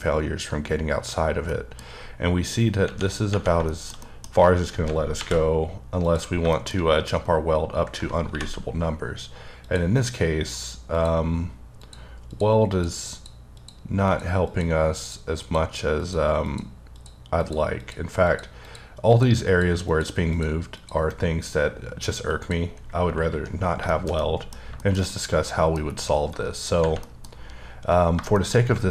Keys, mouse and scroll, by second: 1.5 middle click, 2.4-2.8 scroll up 1, 3.6 shift+middle click, 5.1 alt+v, 6.0 click, 6.5 shift+middle click, 6.7-7.9 shift+scroll up 2, 9.6 click, 10.9 click, 11.8 click, 12.3 click, 12.7 click, 13.1 click, 13.6 click, 14.0 click, 14.4 click, 15.0 click, 16.0 click, 16.4 click, 16.9 click, 17.4 click, 17.8 click, 18.6 click, 19.1 click, 19.4 click, 20.3 click, 20.7 click, 22.3 click, 23.5-23.9 scroll down 2, 23.9 shift+middle click, 24.2 middle click, 24.9 shift+scroll down 1, 25.1 middle click, 26.6-28.0 scroll down 2, 27.0 middle click, 28.0-28.3 scroll down 2, 28.3 shift+middle click, 28.5-28.9 shift+scroll down 2.